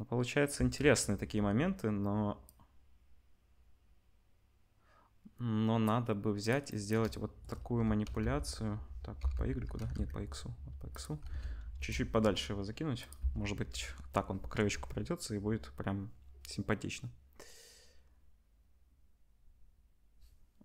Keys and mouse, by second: 0.5 space, 2.4-6.4 drag, 7.7 g, 11.3 ctrl+s, 11.7 KP_0, 12.4-12.9 middle drag, 12.9-20.6 drag, 13.7 space.